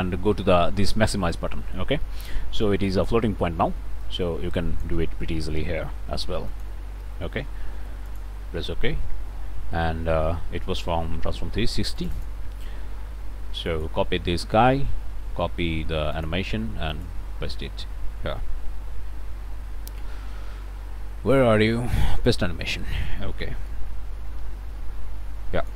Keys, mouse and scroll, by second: 4.0-5.0 ctrl+drag, 6.5 click, 7.0 BackSpace, 8.1 click, 10.8 middle click, 12.0-13.9 drag, 13.9 right click, 16.1 click, 16.9 click, 22.3 click, 23.7-25.7 drag.